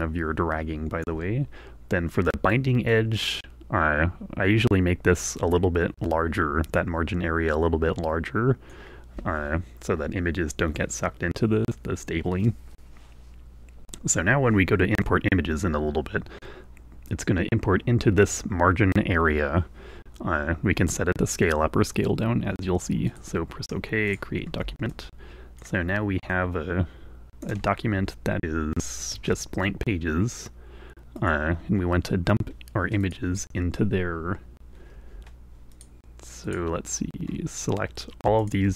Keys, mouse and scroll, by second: 3.4-5.4 drag, 22.5-28.1 drag, 29.6 space, 31.7 click, 33.3 click, 36.1 click, 36.8 click.